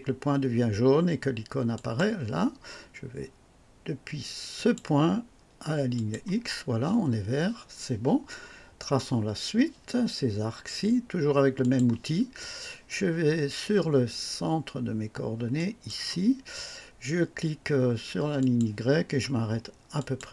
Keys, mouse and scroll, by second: 1.7 click, 4.5 click, 5.9 click, 11.6 click, 15.5 click, 18.4 click, 19.9 click.